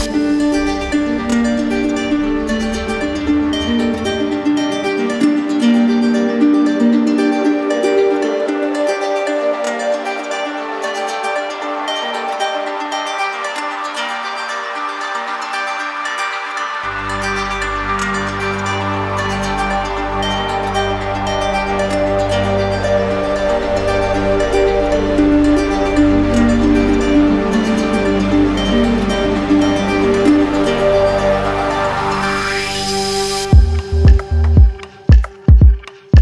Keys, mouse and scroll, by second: 0.7 click, 1.4 ctrl+z, 2.4 click, 3.0 click, 3.5 click, 5.1 shift+click, 6.2 shift+click, 6.6 shift+click, 6.8 shift+click, 8.7 click, 10.0 click, 10.7 click, 11.2 click, 11.7 click, 12.1 click, 12.6 click, 13.0 click, 13.3 click, 13.9 click, 14.5 click, 14.9 click, 15.2 click, 15.6 click, 16.9-17.8 shift+click, 17.3 shift+click, 17.9 shift+click, 18.0 shift+click, 18.2 shift+click, 18.5 shift+click, 19.5 right click, 20.1 shift+click, 22.5 shift+click, 23.0 shift+click, 23.8 shift+click, 24.0 shift+click, 24.3 shift+click, 24.4 shift+click, 24.9 shift+click, 25.4 shift+click, 25.6 shift+click, 26.5 shift+click, 26.8 shift+click, 27.0 shift+click, 27.2 shift+click, 27.9 shift+click, 28.2 shift+click, 29.0 z, 29.7 click, 31.8 click, 32.7 shift+click, 33.4 shift+click, 34.1 shift+click, 34.4 shift+click, 34.6 shift+click, 35.4 right click.